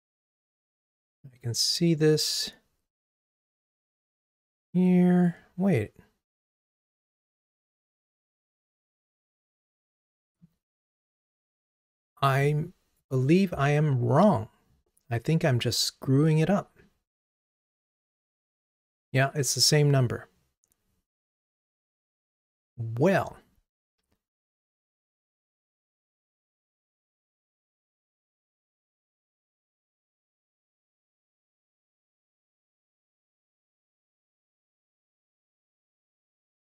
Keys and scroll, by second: 11.9 super+c, 18.6 super+v, 27.9 ctrl+Tab.